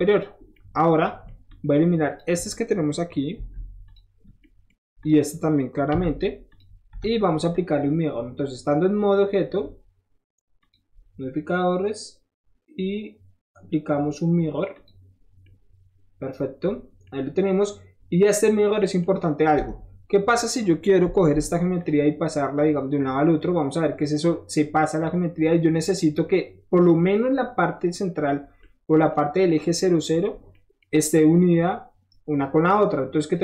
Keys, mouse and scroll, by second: 0.1 click, 0.4 scroll down 1, 0.6-1.3 scroll up 1, 1.5 click, 3.5 Delete, 3.8 click, 4.3 middle click, 4.4 middle click, 5.0 click, 6.5 click, 6.9 Tab, 10.6 click, 14.8 click, 15.3 middle click, 15.5-18.7 middle drag, 19.0 middle click, 19.6 Tab, 21.8 click, 22.6-27.1 drag, 28.4 scroll down 1, 28.6-29.1 scroll up 1, 29.2-30.0 scroll up 2, 30.0 scroll up 1, 30.3 scroll down 1, 30.6 scroll up 1, 31.5-33.4 drag.